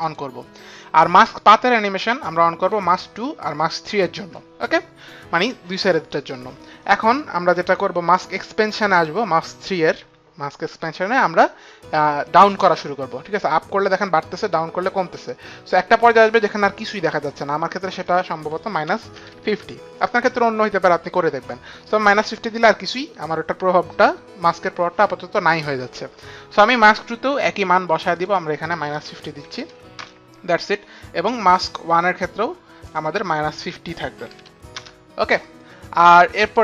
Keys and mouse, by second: 0.5 click, 3.4 click, 4.2 click, 12.5 click, 18.5 click, 19.3 KP_Subtract, 19.6 KP_5, 19.7 KP_0, 19.9 Return, 29.5 KP_Subtract, 29.9 KP_Subtract, 29.9 KP_5, 30.0 KP_0, 31.0 Return, 31.0 KP_Subtract, 31.0 KP_0, 31.0 KP_5, 32.0 click, 33.3 click, 34.1 KP_5, 34.2 KP_Subtract, 34.2 Return, 34.2 click, 34.8 KP_0, 34.8 KP_5, 35.2 Return.